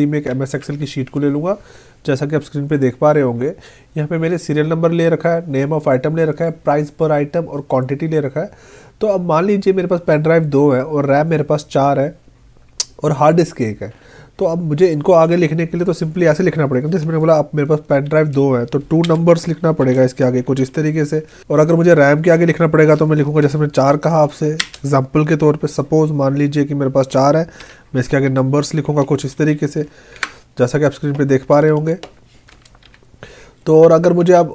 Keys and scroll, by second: 19.1 space, 24.6 space, 30.2 Down.